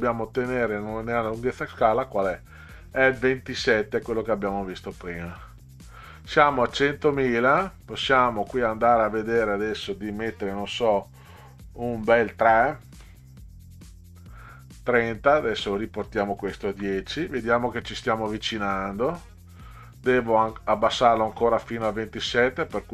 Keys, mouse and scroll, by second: 8.6 click, 14.6 click, 15.6 click, 16.7 1, 22.3 click.